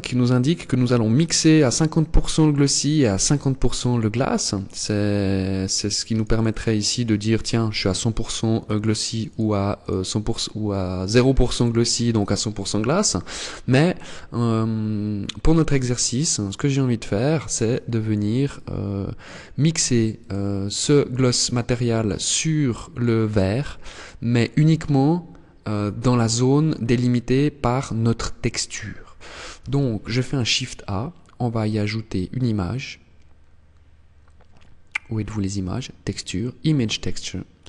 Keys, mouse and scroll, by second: 5.4 click, 5.7 click, 5.9 click, 6.0 click, 6.3 click, 7.9 click, 8.1 click, 8.4 click, 8.6 click, 9.1 click, 14.8 click, 16.1 click, 17.0 click, 17.9 click, 19.9 click, 21.7 click, 28.9 shift+a, 36.2 click.